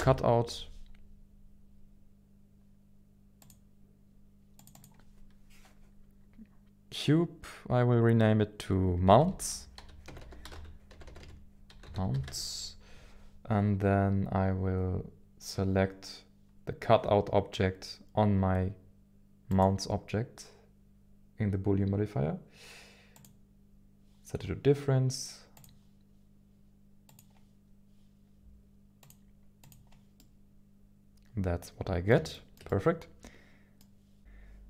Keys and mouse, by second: 9.0-12.8 shift+drag, 10.2 BackSpace, 11.1 BackSpace, 12.8 BackSpace, 19.6-23.3 drag, 25.5 click, 27.1-29.7 drag, 30.2-32.1 middle drag, 32.4 shift+middle click, 32.7-33.8 middle drag.